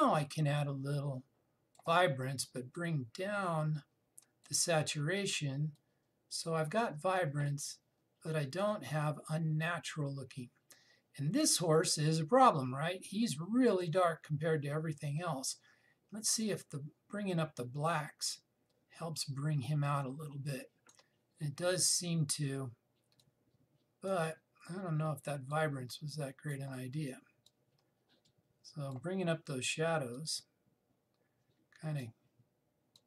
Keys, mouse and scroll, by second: 17.1-33.0 drag.